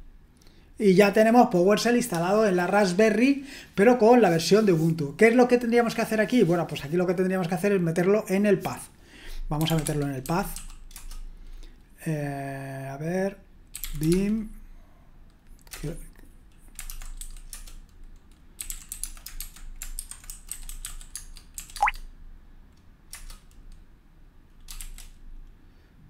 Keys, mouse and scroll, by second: 9.4-11.0 typing, 13.5-14.5 typing, 15.7 Return, 16.9-22.0 typing, 23.1 Return, 24.8 shift+g.